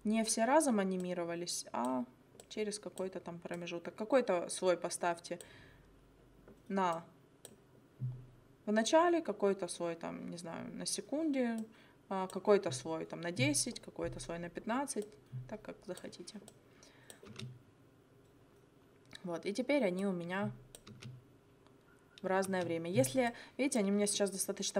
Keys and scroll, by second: 17.3 space, 20.9 space, 22.5 space, 24.4 space.